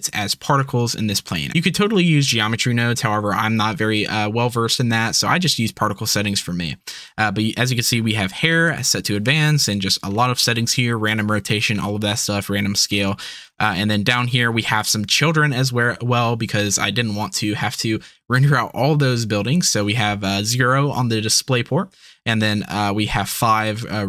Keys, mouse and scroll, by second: 11.4 middle click.